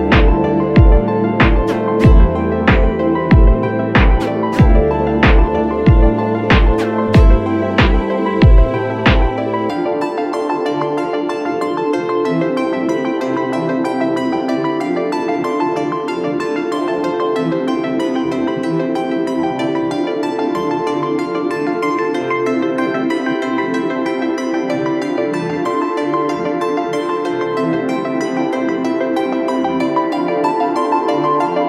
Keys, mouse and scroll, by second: 5.6-7.0 typing, 27.9 ctrl+t, 28.2 alt+shift+click.